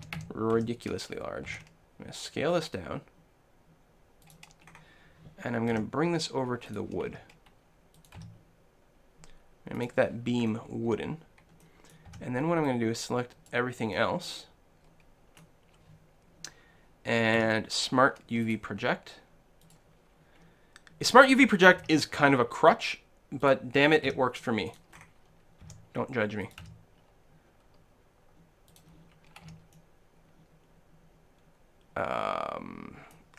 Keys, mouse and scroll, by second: 0.1 a, 0.2 a, 0.6 s, 1.6 s, 4.4-6.4 drag, 5.0 s, 5.8 g, 6.8-8.5 drag, 7.1 s, 8.2 g, 9.9 click, 10.4 click, 10.4 middle click, 10.5-11.6 drag, 10.5 middle click, 11.0 a, 11.8-15.7 middle drag, 12.3 b, 17.4 u, 21.8 s, 23.6-28.3 drag, 24.1 g, 25.7 s, 26.7 g, 28.9-30.7 drag, 29.5 a, 29.7 middle click, 30.5-31.8 middle drag.